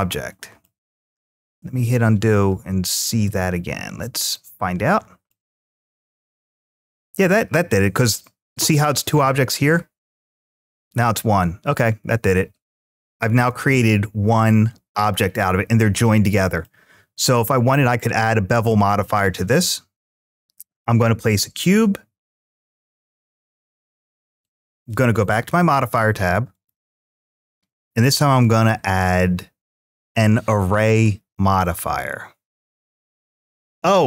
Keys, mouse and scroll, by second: 4.1-5.1 middle drag, 5.9 ctrl+z, 12.9 middle click, 14.3-15.1 middle drag, 15.3-15.7 scroll up 1, 16.0-16.5 middle drag, 16.0-16.5 scroll up 1, 20.2 click, 24.5 click, 26.3-34.0 drag, 32.6 Tab.